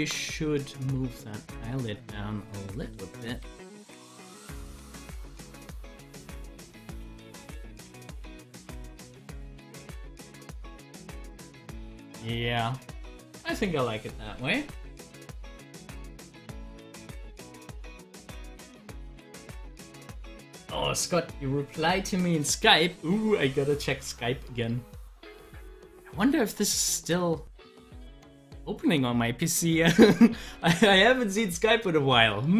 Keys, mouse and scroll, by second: 1.4 click, 3.5 Down, 5.1-6.9 drag, 7.9 Down, 8.8 click, 10.1 Down, 11.0 click, 20.3 click, 25.2-32.5 drag.